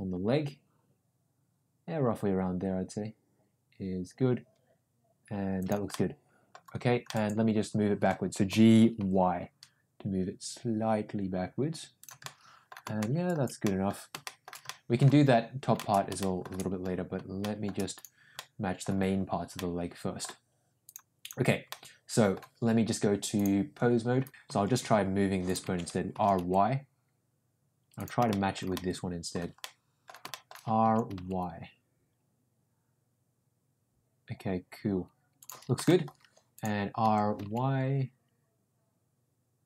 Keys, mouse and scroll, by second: 6.0 middle click, 7.0 middle click, 8.4 g, 12.2 middle click, 13.0 shift+middle click, 13.6 middle click, 14.2 shift+middle click, 14.8 middle click, 15.9 middle click, 16.2 shift+middle click, 17.5 shift+middle click, 18.3 middle click, 19.5-20.1 middle drag, 20.8 click, 21.1 click, 21.6-22.2 middle drag, 23.3-24.3 drag, 24.6 shift+middle click, 25.0 r, 25.9 ctrl+z, 26.1 r, 28.2-28.6 shift+middle drag, 28.7 middle click, 29.5 middle click, 30.2 shift+middle click, 30.8 r, 35.9 shift+middle click, 37.0 r.